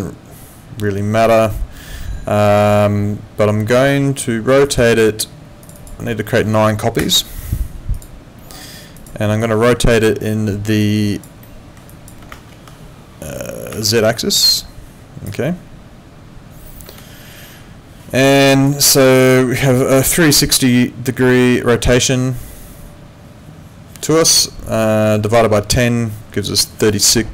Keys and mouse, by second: 4.5 click, 7.9 click, 10.8 alt+click, 11.4 alt+middle click, 11.9 alt+click, 12.6 ctrl+2, 16.9 Escape, 18.4 click.